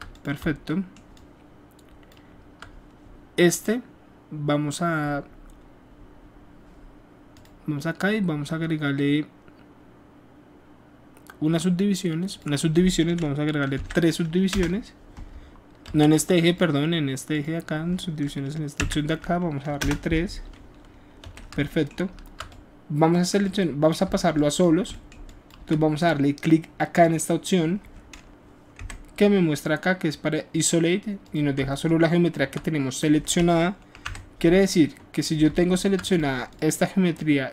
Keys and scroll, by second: 13.8 KP_3, 14.5 Return, 15.8 ctrl+z, 18.8 KP_3, 19.8 Return, 21.2 w, 34.0 KP_Multiply.